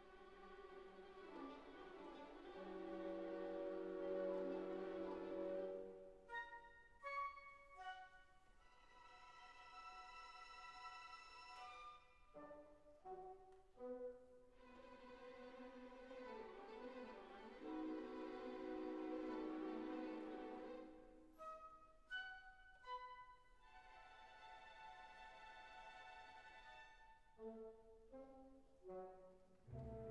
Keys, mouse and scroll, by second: 0.9 s, 2.9 shift+click, 6.7 shift+click, 9.0 right click, 10.4 click, 10.8 click, 11.0 ctrl+3, 18.6-19.1 drag, 19.6-20.2 drag, 21.1-21.5 drag, 23.0 Tab, 24.4 1, 30.0 click.